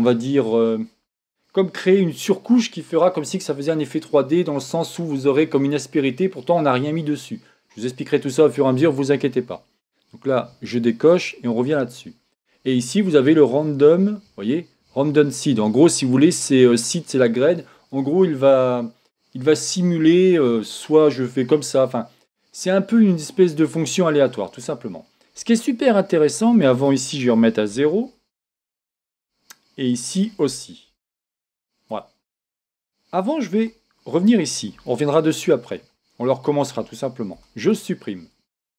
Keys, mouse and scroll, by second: 10.6 click, 11.3-13.6 middle drag, 13.6 click, 26.5 click, 29.9 click, 32.7-34.7 middle drag, 33.6 Tab, 34.8-36.7 middle drag, 37.3 x.